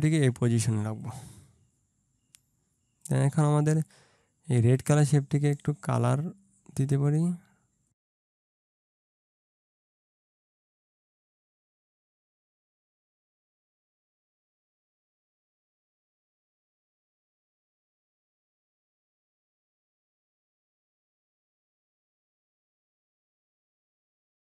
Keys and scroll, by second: 16.6 Return, 18.0 ctrl+space, 20.6 ctrl+space.